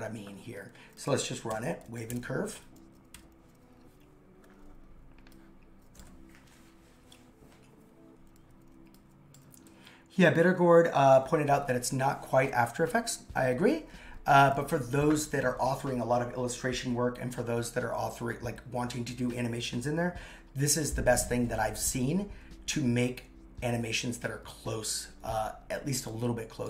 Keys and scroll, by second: 1.5 super+/.